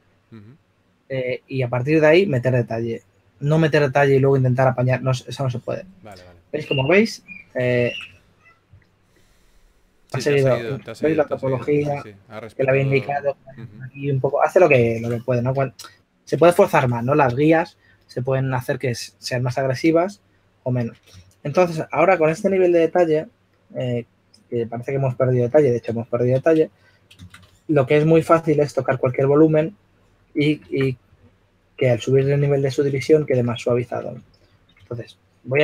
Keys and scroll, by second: 7.5 shift+f, 11.2 s, 20.1 s, 21.4 shift+f, 27.9 s, 28.5 s, 31.2 super+z, 33.1 shift+f, 35.0 shift+f.